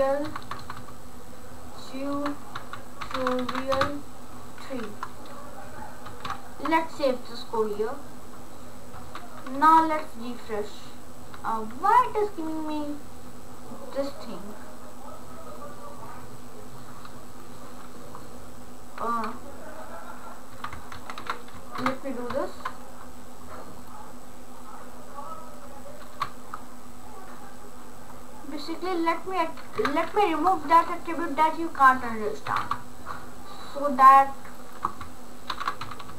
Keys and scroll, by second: 0.0-0.4 typing, 2.3-4.9 typing, 6.0 ctrl+s, 20.6 Delete, 21.0 shift+1, 21.9 ctrl+Return, 26.2 BackSpace, 29.8 BackSpace, 32.5 Delete, 32.7 Delete, 35.2-36.1 typing.